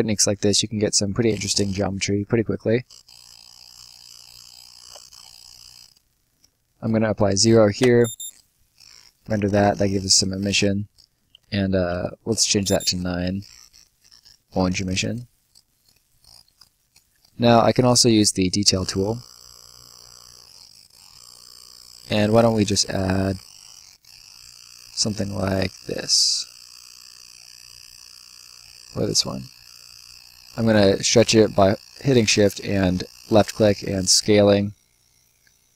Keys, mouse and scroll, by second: 0.4 click, 1.1 Escape, 2.7 click, 4.8 ctrl+shift+click, 5.4 Escape, 5.7 click, 7.0 click, 7.8 space, 8.6 right click, 11.8 9, 12.2 space, 13.3 right click, 15.0-15.4 scroll up 1, 15.4 middle click, 15.8-16.1 scroll up 1, 16.1 middle click, 16.5 scroll down 1, 16.7 right click, 17.1-17.6 scroll up 1, 17.6 middle click, 18.6 click, 20.5 middle click, 22.0-22.3 scroll down 1, 23.9 middle click, 24.8 click, 28.5 click.